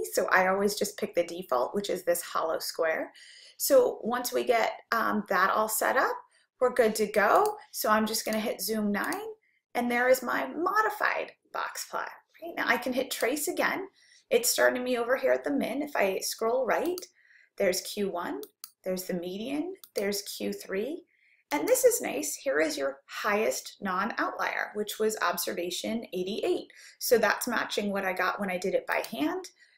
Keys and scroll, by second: 7.4 Return, 9.1 9, 17.0 Right, 18.6 Right, 21.7 Right, 29.6 Right.